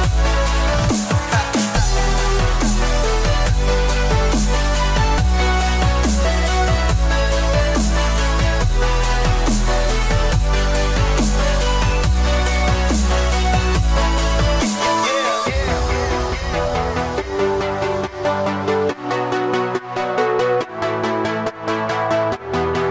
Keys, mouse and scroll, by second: 1.6 middle click, 8.0 click, 10.2 click, 12.2 click, 13.2 click, 14.2 scroll down 2, 15.1 click, 15.7 middle click, 19.7 ctrl+z, 19.9 ctrl+z, 20.2 ctrl+z, 20.4 ctrl+z, 20.6 ctrl+z, 21.0 ctrl+z, 21.2 ctrl+z, 21.3 ctrl+z, 21.7 ctrl+z, 22.2 ctrl+z, 22.6 ctrl+z, 22.8 ctrl+z.